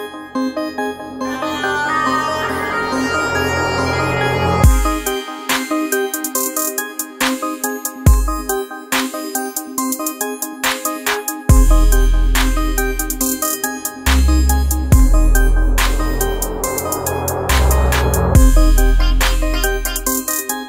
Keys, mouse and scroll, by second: 2.4-8.0 drag, 8.0 Left, 11.0 click.